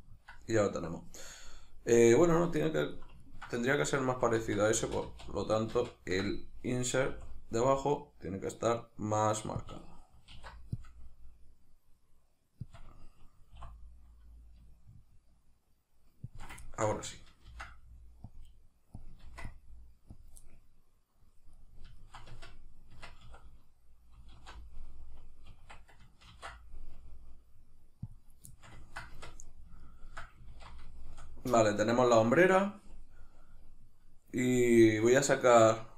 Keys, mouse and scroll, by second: 4.5 ctrl+z, 7.1 |, 9.7 click, 10.3 alt+e, 12.7 click, 16.4 shift+click, 16.6-19.1 ctrl+middle drag, 17.5 ctrl+r, 19.1 click, 19.2 ctrl+r, 20.2 click, 20.4-26.3 middle drag, 22.3 Tab, 23.2 a, 24.4 alt+e, 25.6 Escape, 26.3 ctrl+e, 28.5 shift+middle click, 29.2 Tab, 29.4 middle click, 30.5 alt+q, 30.9 shift+middle click, 35.2-35.9 middle drag.